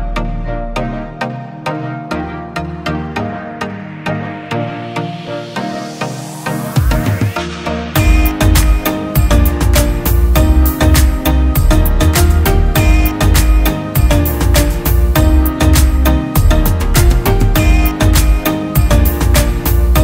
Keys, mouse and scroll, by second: 6.9 ctrl+-, 13.2 ctrl+-.